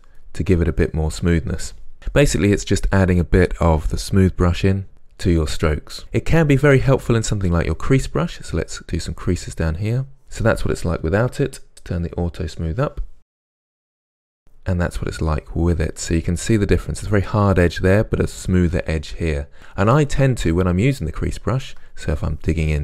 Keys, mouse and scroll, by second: 0.3-7.5 middle drag, 7.5 click, 7.9 middle click, 8.6-19.4 drag, 19.4-21.6 middle drag, 21.6-22.8 ctrl+drag.